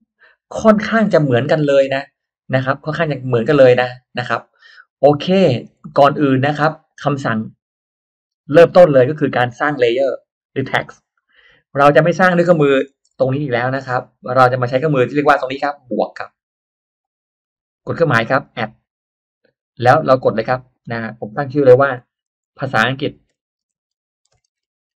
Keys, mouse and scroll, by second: 2.8 click, 3.6 click, 5.4 scroll down 1, 5.9-6.7 middle drag, 5.9-6.7 scroll up 1, 6.8-7.1 scroll up 1, 13.2 shift+x, 13.5 shift+click, 14.5-16.6 shift+drag, 16.8 shift+right click, 18.8 click, 22.4-25.0 typing.